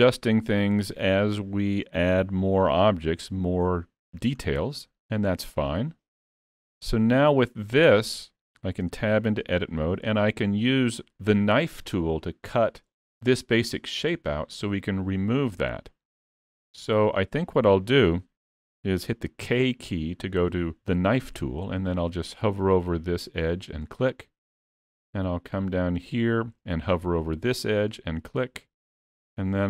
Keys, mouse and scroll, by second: 2.2 alt+a, 3.1 middle click, 4.4 scroll down 4, 4.9 middle click, 6.8 click, 7.5 middle click, 8.9 Tab, 9.5 middle click, 15.6-16.0 scroll up 1, 16.0 middle click, 17.3 scroll up 1, 17.6 middle click, 19.5 k.